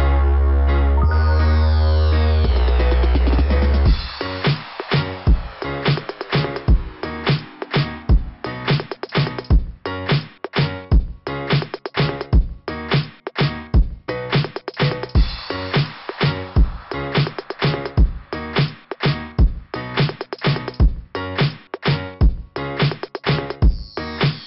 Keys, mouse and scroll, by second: 0.8 click, 1.0 click, 1.7 right click, 1.8 right click, 2.8 click, 3.0 click, 4.4 click, 4.5 click, 6.3 click, 9.1 click, 9.2 click, 11.0 click, 12.0 click, 14.1 click, 18.8 typing, 21.4 click, 21.4 typing, 21.5 click, 24.1 scroll up 2.